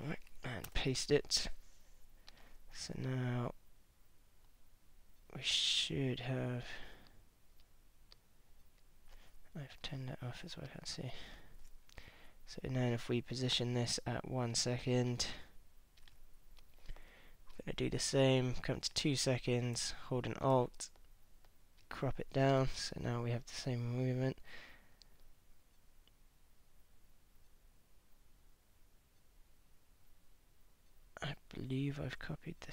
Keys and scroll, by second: 0.7 super+v.